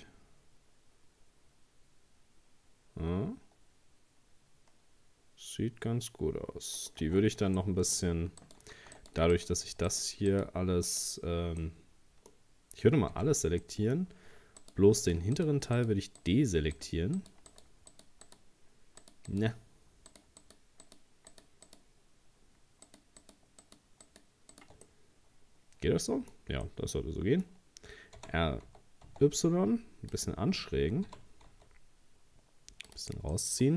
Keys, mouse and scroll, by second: 7.0 Tab, 7.6 middle click, 8.4 right click, 9.0 shift+right click, 9.3 right click, 9.9 shift+right click, 10.3 shift+right click, 10.9 shift+right click, 11.6-13.1 middle drag, 13.1 a, 13.6 middle click, 14.6 shift+right click, 15.0 shift+right click, 15.4 shift+right click, 15.8 shift+right click, 16.2 shift+right click, 16.7 shift+right click, 17.2 shift+right click, 17.5 shift+right click, 17.9 shift+right click, 18.3 shift+right click, 19.0 shift+right click, 19.3 shift+right click, 20.1 shift+right click, 20.4 shift+right click, 20.8 shift+right click, 21.3 shift+right click, 21.7 shift+right click, 22.9 shift+right click, 23.2 shift+right click, 23.6 shift+right click, 24.0 shift+right click, 24.5 shift+right click, 24.9-28.2 middle drag, 28.2 r, 31.1 g, 33.3 middle click.